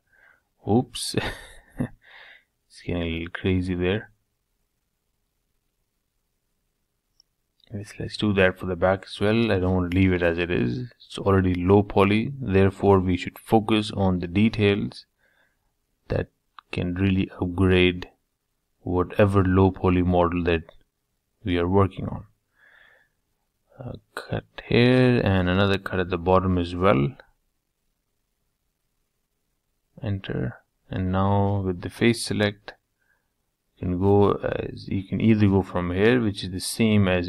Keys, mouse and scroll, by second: 3.5-5.3 middle drag, 8.2 ctrl+z, 8.7-10.3 middle drag, 10.3 k, 15.3-17.2 middle drag, 17.3 ctrl+z, 19.1 k, 24.3 k, 28.8-30.2 middle drag, 30.2 shift+click, 30.6-32.6 middle drag, 33.8-37.2 drag.